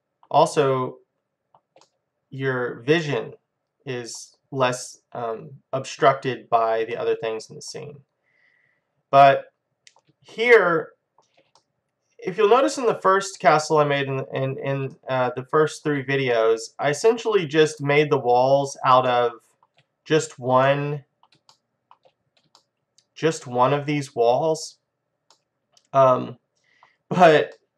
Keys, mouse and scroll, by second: 4.4-5.2 scroll down 1, 5.2-6.2 scroll down 1, 6.2-8.8 middle drag, 8.9-9.3 scroll down 1, 9.3-13.5 middle drag, 15.0-23.8 middle drag, 26.0 middle click, 26.4-27.7 middle drag.